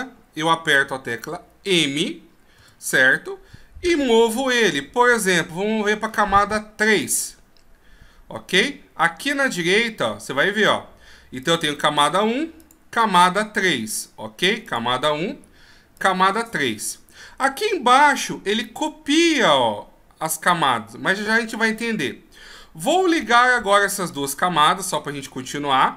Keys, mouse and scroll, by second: 2.7 m, 11.5 click, 12.7 click, 14.8 click, 16.1 click.